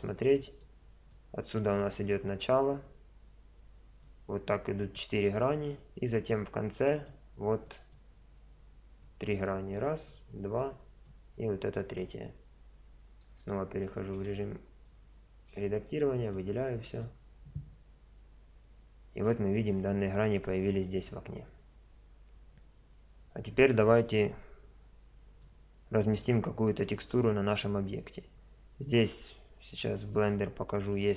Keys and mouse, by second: 0.7 middle click, 9.7-14.1 middle drag, 13.3 Tab, 14.1 a, 14.9 Tab, 15.5 a, 16.4-24.7 middle drag, 25.4-30.2 middle drag.